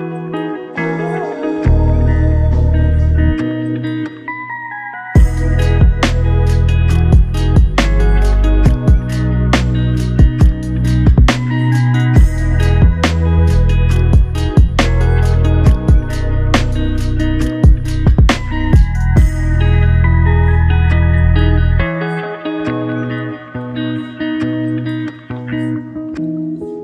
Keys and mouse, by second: 1.2 double click, 6.7 double click, 6.9 shift+click, 7.8 shift+click, 11.4 shift+click, 12.3 shift+click, 18.6 double click, 26.2 double click, 26.3 shift+click.